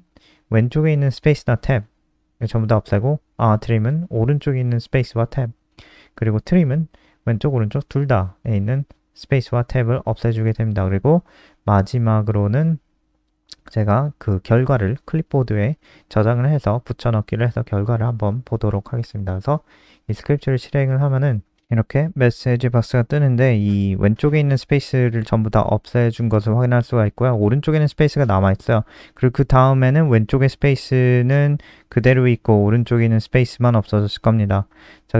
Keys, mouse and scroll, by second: 13.6 ctrl+s, 21.7 click, 22.0 ctrl+s, 22.3 F5, 27.7 click.